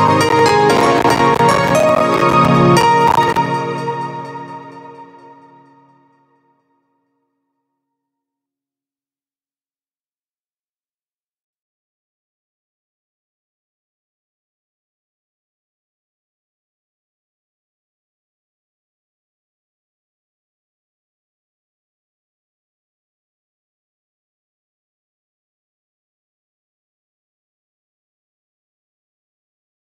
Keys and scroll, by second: 2.9 space, 23.9 space.